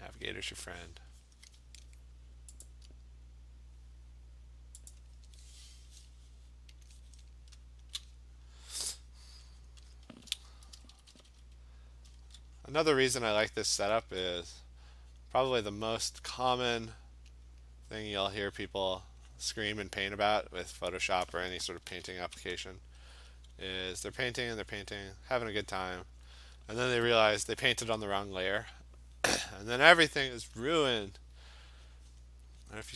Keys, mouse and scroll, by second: 0.1 click, 2.7 click, 4.9 click, 6.9 click, 7.1 click, 7.6 scroll, 7.7 click, 7.8 click, 8.0 click, 9.3 click, 9.7 click, 10.0 click, 10.8-12.2 typing, 12.7 click, 13.1 click, 13.5 [, 13.7 [, 14.1 [, 15.2 click, 15.8 click, 16.2 click, 16.6 click, 18.9 click, 19.1 click, 19.4 click, 19.9 click, 20.7 click, 20.9 [, 21.9 ], 22.0 ], 23.1-25.8 alt+click, 23.6 click, 23.9 click, 24.1 [, 24.2 click, 25.0 click, 25.8 click, 26.1 click, 26.2 click, 27.1 alt+click, 28.0 alt+click, 28.5 click, 29.3 click, 30.0 click, 30.3 click, 32.2 click, 32.7 click.